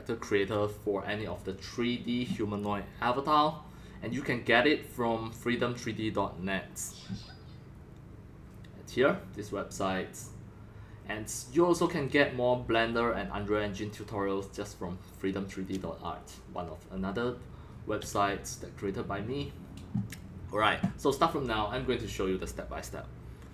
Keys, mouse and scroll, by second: 0.9 scroll down 2, 1.8 scroll down 1, 4.1 middle click, 6.3 click, 6.7 drag.